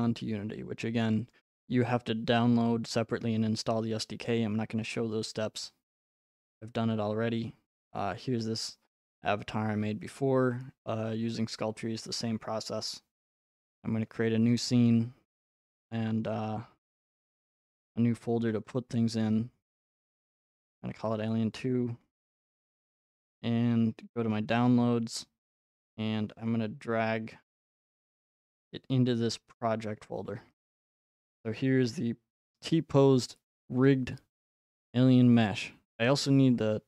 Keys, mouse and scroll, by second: 1.3 click, 6.3 click, 8.1-9.9 scroll, 14.0 click, 14.5 click, 15.8 click, 17.6 click, 18.1 right click, 19.6 click, 20.2-21.7 typing, 22.4 Return, 24.0 click, 24.8-25.8 drag, 28.0-30.1 drag, 32.7-34.8 drag.